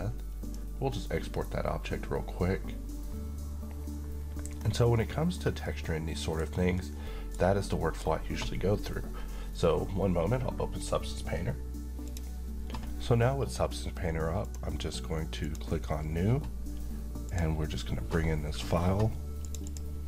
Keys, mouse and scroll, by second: 0.4 click, 4.6-4.9 scroll up 1, 4.9-5.5 middle click, 5.3 scroll down 1, 5.7-6.6 middle click, 6.4 scroll up 1, 6.7-7.4 middle click, 11.8-14.4 drag, 15.1 click.